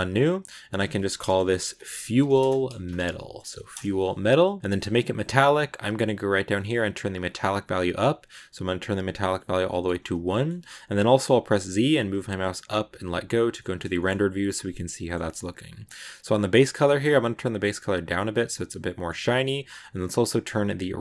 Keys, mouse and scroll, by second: 0.5-3.6 drag, 5.6-6.9 scroll down 3, 6.9-9.5 drag, 9.5-11.4 middle drag, 11.4 z, 13.4 middle click, 13.7-14.3 scroll up 2, 13.8 shift+middle click, 14.3-15.9 middle drag, 15.9 click, 18.4 middle click, 19.2 scroll down 4, 20.5-21.0 scroll down 1.